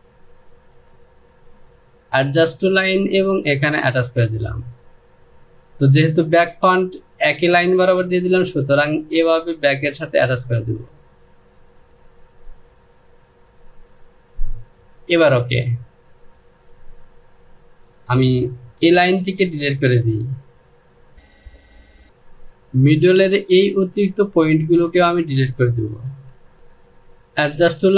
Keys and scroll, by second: 18.3 Delete, 21.8 Home, 25.8 Delete, 26.5 Home.